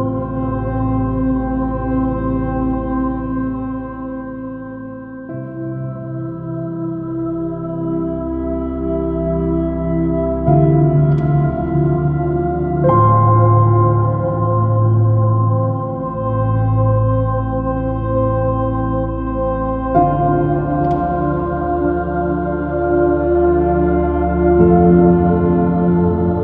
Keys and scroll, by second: 0.6 super+z, 2.1 super+z.